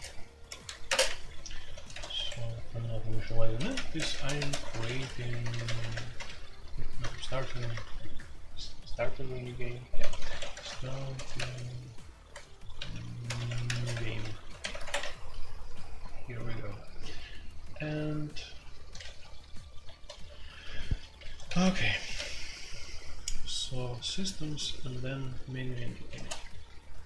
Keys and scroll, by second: 0.5 ctrl+g, 0.7-7.7 typing, 1.6 Tab, 7.4 Tab, 10.0-22.1 typing, 25.5-26.6 typing.